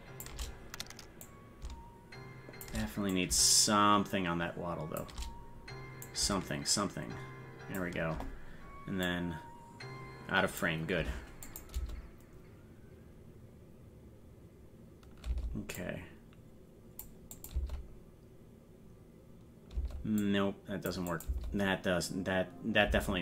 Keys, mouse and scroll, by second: 1.2-2.7 drag, 3.1-5.0 drag, 6.0-7.8 drag, 9.1-10.6 drag, 11.5 click, 11.7 space, 15.8-17.0 drag, 15.8 space, 17.3 click, 20.2 click, 20.2 space, 21.1 click.